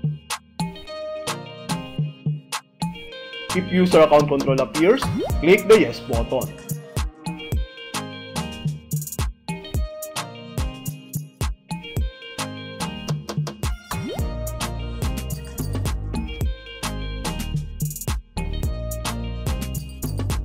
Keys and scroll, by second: 2.3 Return, 6.6 Left, 8.0 space, 10.0 h, 11.3 h, 12.6 h, 14.6 Right, 16.6 s, 17.9 s, 19.3 s.